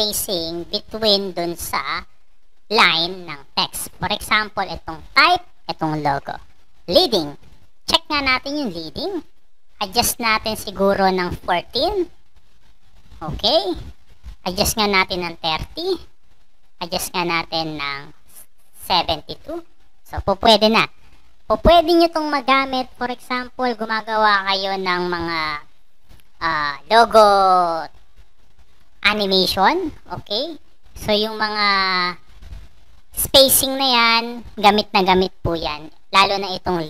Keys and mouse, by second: 7.4 click, 8.1 click, 8.5 click, 9.2 click, 11.1 click, 13.8 click, 14.9 click, 16.4 click, 18.1 click, 23.3-25.0 drag.